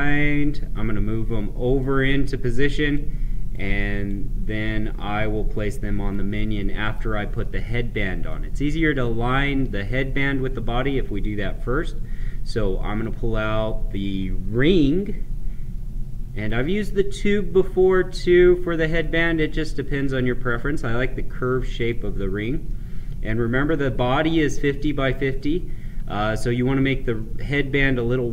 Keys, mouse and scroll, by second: 0.0 scroll down 1, 1.7 middle click, 2.8-6.7 drag, 7.4-10.6 middle drag, 12.1-18.9 drag, 21.8 click, 22.6-26.2 middle drag.